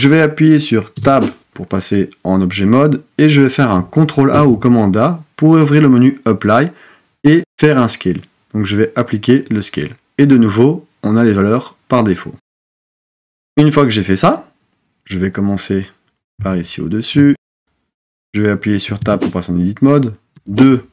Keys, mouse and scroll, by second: 0.9 Tab, 4.3 super+a, 19.1 Tab, 20.3 2.